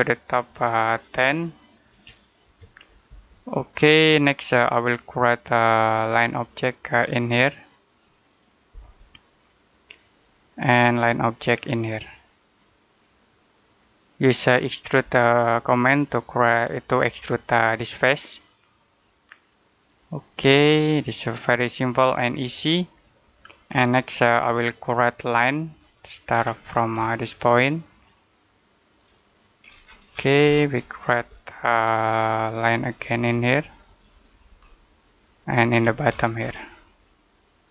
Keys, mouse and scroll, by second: 1.8 typing, 2.9 Return, 4.4 scroll up 1, 5.7 click, 22.6 middle click, 25.5 click, 26.2-26.5 scroll down 1, 26.5-27.5 scroll up 1, 27.5 click, 29.5 scroll down 1, 29.7 scroll up 1, 29.9-31.3 scroll down 1, 31.8 middle click, 33.1 click, 34.5 middle click, 35.6-35.9 scroll down 1, 36.6-37.7 scroll up 1.